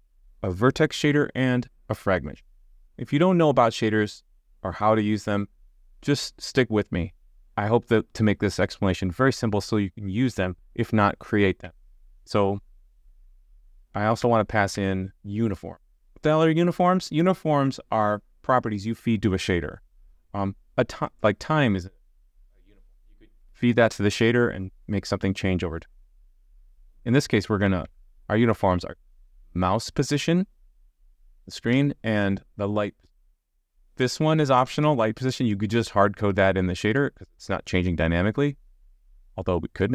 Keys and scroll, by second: 11.6 super+z, 14.2 super+z, 27.8 super+z, 31.7 super+z.